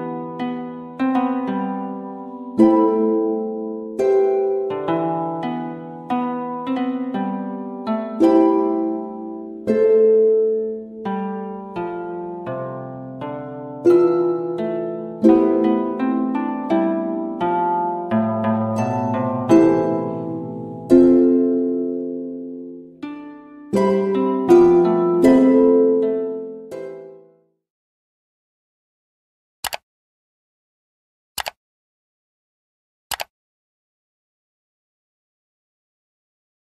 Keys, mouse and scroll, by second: 3.2 v, 3.7 click, 6.2 click.